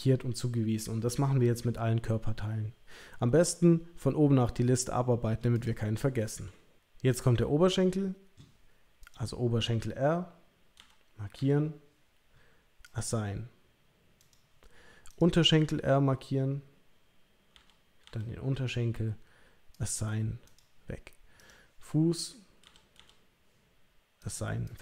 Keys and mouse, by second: 5.6 click, 9.0 click, 10.8 l, 11.4 l, 14.2 click, 15.1 click, 17.5 l, 18.0 l, 19.7 click, 20.4 click, 21.4 click, 22.6 l, 23.0 l, 24.2 click, 24.7 click.